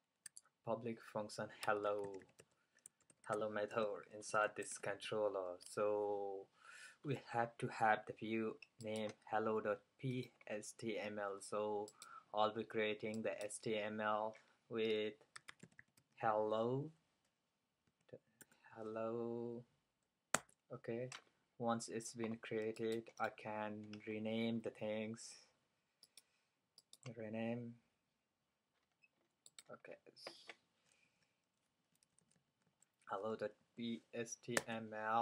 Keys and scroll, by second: 1.5-4.2 typing, 15.2-16.5 typing, 17.9-19.3 typing, 31.1 fn+Left, 31.9 Right, 32.1 Right, 32.3 Right, 32.4 Right, 32.5 Right, 32.7 Right, 33.7 p.